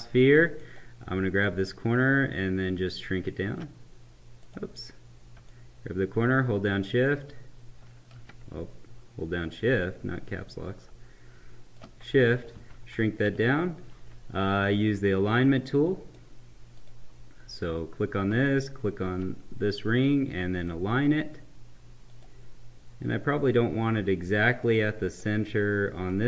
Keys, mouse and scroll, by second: 1.9 Caps_Lock, 4.3 click, 5.4 Caps_Lock, 5.4 click, 6.0 Caps_Lock, 7.8 Caps_Lock, 12.8 Right, 14.9-16.8 right drag, 15.5 right click, 16.8 click, 18.4 shift+click, 20.7 click, 24.6-26.2 right drag.